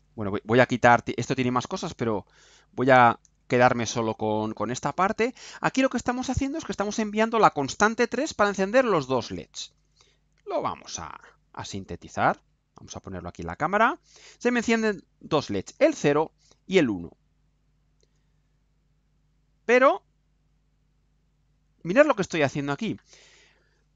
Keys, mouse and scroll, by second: 0.5 click, 0.9-3.1 drag, 3.2 Delete, 4.0 right click, 5.1 scroll up 2, 5.5 right click, 10.5 ctrl+u, 11.1-11.5 ctrl+scroll down 4, 11.9 right click, 13.0 click, 16.3-18.3 right drag, 19.5 click, 19.9 scroll up 2, 20.5 right click, 21.3 scroll up 2, 21.8 right click.